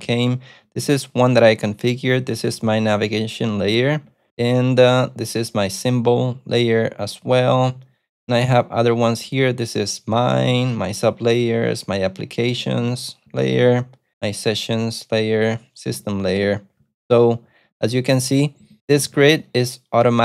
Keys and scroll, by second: 0.0 ctrl+u, 2.6 ctrl+d, 3.2 ctrl+u, 4.0 ctrl+d, 4.3 ctrl+d, 7.4 ctrl+d, 7.6 ctrl+d, 9.0 ctrl+d, 9.1 ctrl+u, 10.2 ctrl+d, 10.8 ctrl+d, 11.5 ctrl+d, 12.6 ctrl+d, 13.4 ctrl+d, 14.1 ctrl+d, 15.8 ctrl+u, 16.2 ctrl+d, 17.5 ctrl+u, 17.6 ctrl+u, 17.9 ctrl+d, 18.0 ctrl+d, 18.2 ctrl+d, 18.6 ctrl+u, 18.8-19.7 typing.